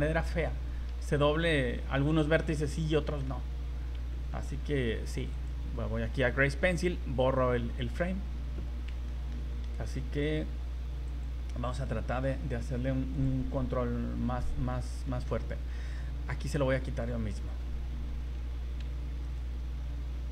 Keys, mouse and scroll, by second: 1.6-1.9 scroll up 2, 2.1 shift+middle click, 2.6 middle click, 3.2 scroll down 3, 3.6-3.9 scroll up 2, 4.1 shift+middle click, 5.3 click, 7.8 click, 8.3 scroll down 1, 9.1 shift+middle click, 9.8 v, 10.2 right click, 11.0 click, 11.8 middle click, 13.1 click, 14.4 middle click, 15.1 middle click, 16.8 middle click, 19.2 right click.